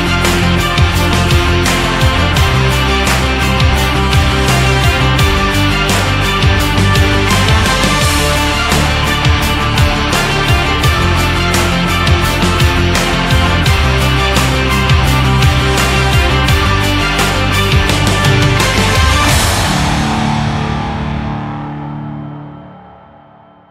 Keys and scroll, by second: 6.2 ctrl+j, 16.5 ctrl+t.